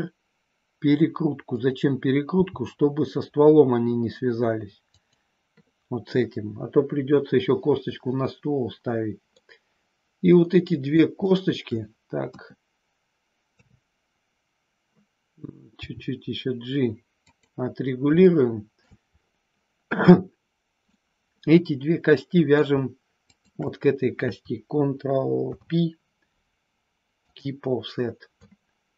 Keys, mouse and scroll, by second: 1.5 click, 2.3 g, 4.9 click, 9.4-10.9 middle drag, 11.1 scroll up 1, 11.3 shift+middle click, 11.7 scroll down 1, 12.1 KP_1, 13.5 KP_3, 15.8 g, 17.1 click, 18.1 scroll up 1, 18.3 shift+middle click, 18.8 scroll down 1, 20.8-21.1 scroll up 1, 21.1-22.5 middle drag, 23.3 shift+click, 25.4 ctrl+p, 28.4 shift+middle click.